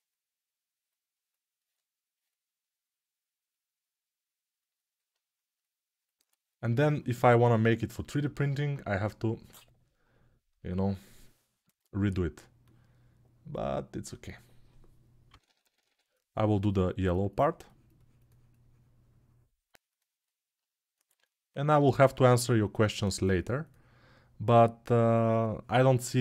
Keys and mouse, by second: 12.7-22.8 middle drag, 22.8-26.2 drag.